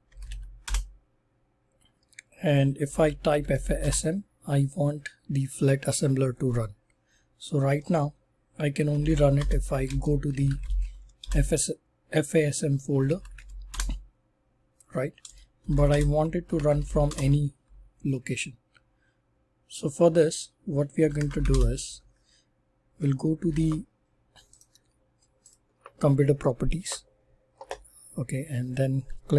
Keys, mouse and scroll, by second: 0.0-0.8 typing, 2.6-3.9 typing, 3.3 click, 8.6-11.0 typing, 11.2 Return, 12.8-13.8 typing, 15.4-17.2 typing, 20.6-21.8 typing, 23.4 super+e, 24.5 right click, 25.4 click.